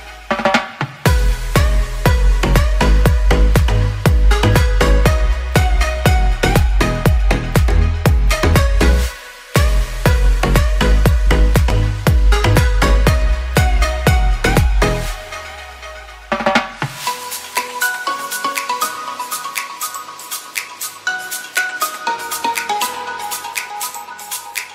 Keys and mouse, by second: 1.0 a, 1.5 a, 1.7 q, 2.4 a, 2.7 Tab, 2.9-4.2 drag, 5.6 a, 5.9 ctrl+s, 7.9 z, 9.5 shift+drag, 9.9 click, 10.4 ctrl+s, 11.0 click, 13.1 KP_3, 13.7 shift+a, 15.1 shift+drag, 15.4 Tab, 16.0 r, 18.1 z, 18.6 s, 19.9 shift+click, 20.1 g, 22.6 a, 22.8 b, 23.5 1, 24.2-24.7 drag.